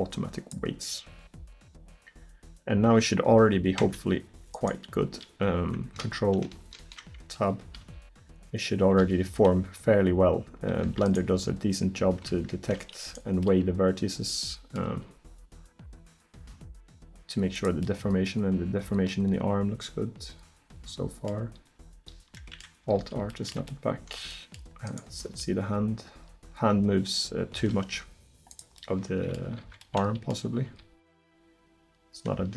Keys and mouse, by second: 3.8 Tab, 6.8 ctrl+Tab, 7.9 r, 11.2-12.7 drag, 11.3 r, 15.0 r, 21.1-22.4 middle drag, 23.0 alt+r, 24.9-25.3 right drag, 25.3 r, 29.7 ctrl+z, 30.7 r.